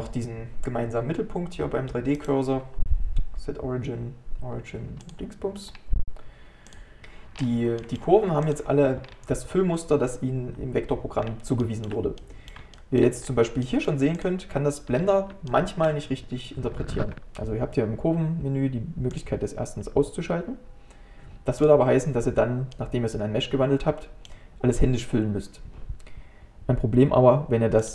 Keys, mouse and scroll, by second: 2.2-5.3 right drag, 5.8-6.7 scroll up 1, 6.7 click, 7.0 middle click, 7.4-7.8 scroll down 5, 7.8 middle click, 8.5 click, 9.1 scroll up 2, 10.7-11.3 scroll up 1, 11.3-11.6 scroll up 2, 11.6-13.3 shift+middle drag, 13.3-13.7 scroll up 2, 13.7 middle click, 14.2 click, 15.0-15.5 scroll up 3, 15.5-18.5 shift+middle drag, 22.8-25.8 middle drag.